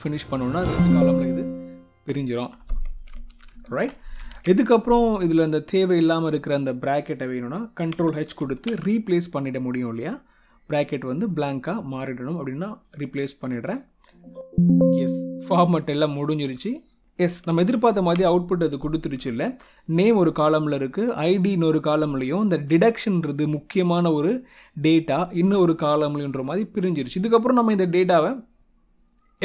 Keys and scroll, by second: 3.0 ctrl+Down, 3.7 ctrl+Up, 8.3 ctrl+h, 17.8 ctrl+Up.